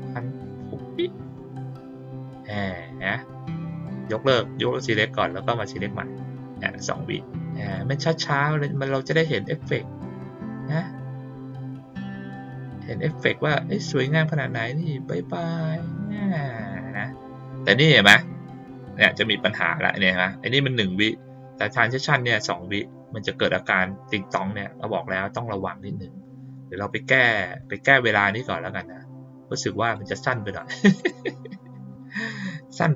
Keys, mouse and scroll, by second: 0.3 click, 1.2 click, 2.5 click, 4.0 click, 4.6 click, 5.2 click, 7.6 click, 11.8 click, 29.8 click, 30.9 click.